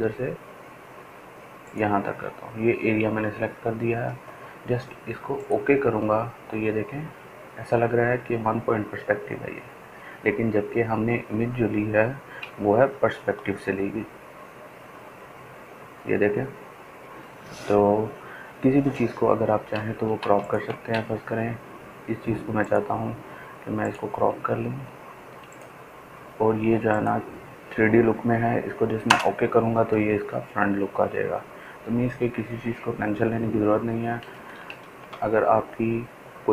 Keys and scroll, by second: 15.7 ctrl+z, 32.1 Return.